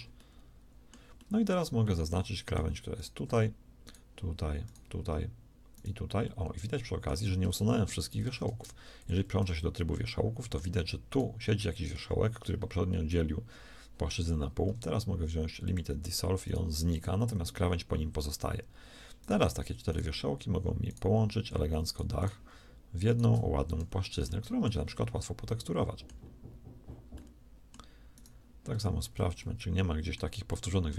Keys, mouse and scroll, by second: 0.0 x, 8.1 ctrl+Tab, 14.5 x, 16.7 x, 23.5 shift+f, 23.7 a, 27.0 middle click, 28.0-30.9 middle drag, 28.7 z.